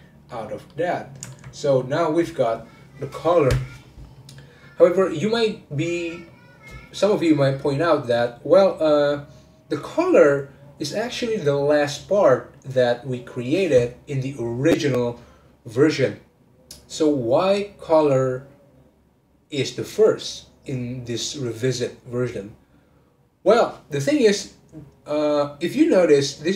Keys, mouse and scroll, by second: 0.4 scroll up 2, 0.7-3.9 middle drag.